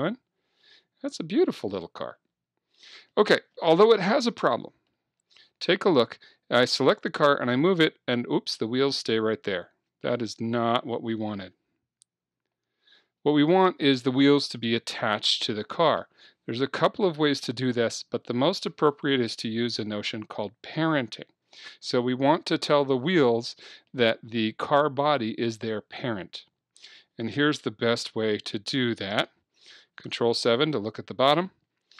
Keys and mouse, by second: 3.6-5.2 middle drag, 5.2-7.1 right drag, 7.3-8.9 drag, 9.9 Escape, 12.3 z, 23.9-25.9 middle drag, 28.1 KP_7, 30.1 ctrl+KP_7.